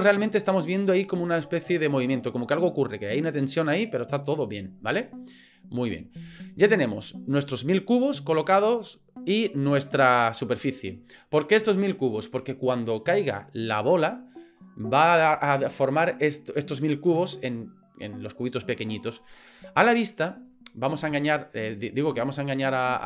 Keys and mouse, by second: 5.6 click, 20.1-20.5 middle drag, 21.1-21.4 shift+middle drag.